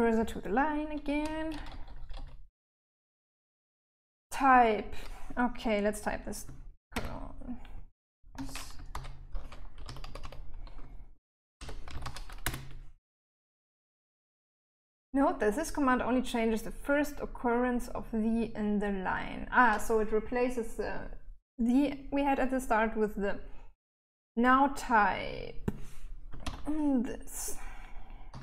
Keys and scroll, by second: 0.4-1.4 typing, 6.1 shift+;, 7.6-11.8 typing, 25.7 typing, 27.5-28.4 typing.